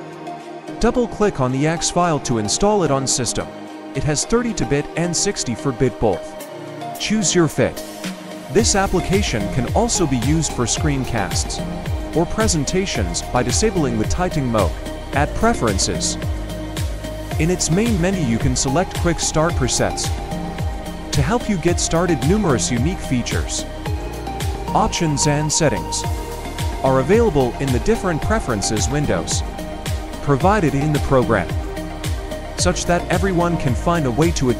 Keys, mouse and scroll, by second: 1.1 double click, 8.2 Caps_Lock, 20.3 right click.